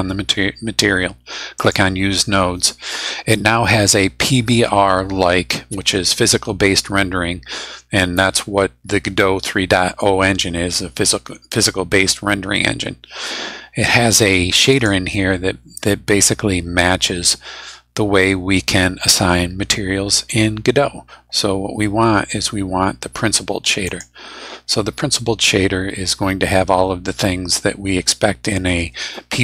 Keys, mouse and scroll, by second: 1.6 click, 14.7 click, 23.8 click, 27.6 scroll down 1, 28.1-28.7 scroll down 4.